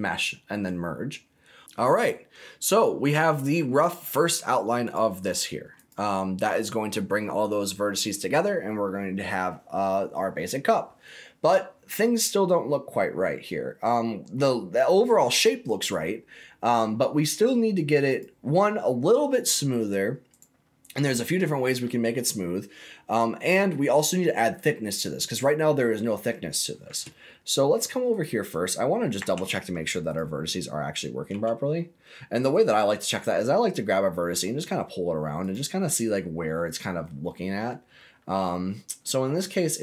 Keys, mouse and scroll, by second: 1.6 Tab, 1.6 middle click, 1.6 scroll up 2, 2.7 click, 3.2 middle click, 3.7 click, 4.8 click, 5.2 click, 5.7 click, 9.5-11.5 scroll down 1, 13.2-13.9 scroll up 2, 13.9 middle click, 14.3 scroll down 1, 16.7 scroll up 2, 18.0 click, 20.2 right click, 25.8-26.7 scroll up 2, 27.1 shift+middle click, 28.1 click, 29.1 Tab, 30.0 click, 31.2 g, 35.4 click, 35.9-37.0 middle drag, 37.2 middle click, 37.9 scroll up 2, 38.3-39.8 middle drag.